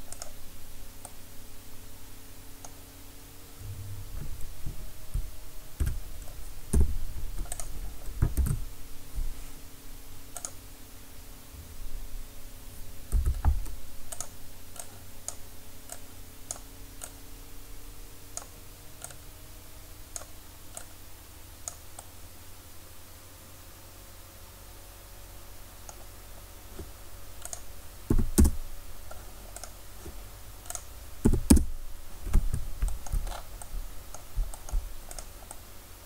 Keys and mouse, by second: 5.8 Tab, 6.7 Delete, 8.4 shift+a, 13.1 s, 14.2-27.1 drag, 27.5-29.6 drag, 29.6-30.7 right drag, 32.4-35.1 drag, 35.1-35.8 right drag, 35.8-36.0 drag.